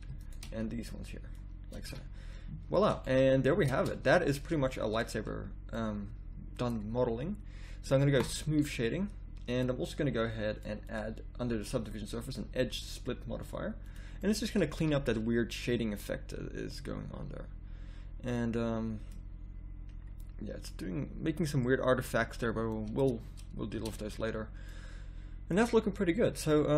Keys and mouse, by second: 1.9 a, 3.6 Tab, 9.0 middle click, 14.2 middle click, 14.8 a, 15.3 middle click, 19.3-20.6 middle drag, 20.6-21.7 drag, 23.3 Tab, 23.8 Tab.